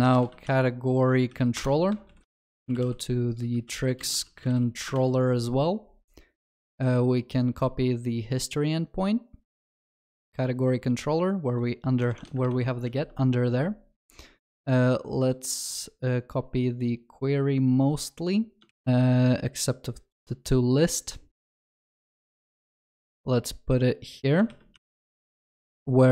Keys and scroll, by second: 0.0 ctrl+shift+n, 9.6 ctrl+c, 12.9 ctrl+s, 18.7 ctrl+c.